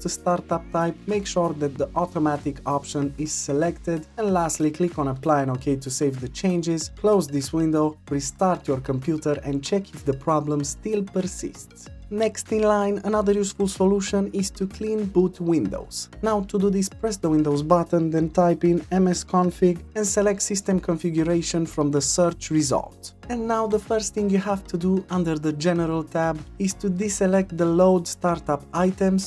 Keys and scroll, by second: 17.5 typing.